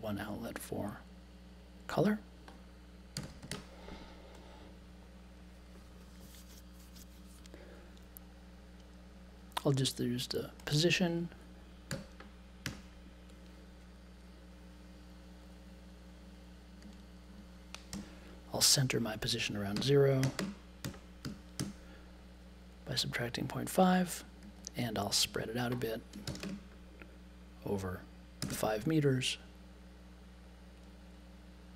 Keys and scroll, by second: 2.9-4.0 typing, 11.9 n, 12.6 -, 17.9 BackSpace, 19.7-21.5 typing, 26.2 shift+8, 26.4 space, 28.1-29.0 typing.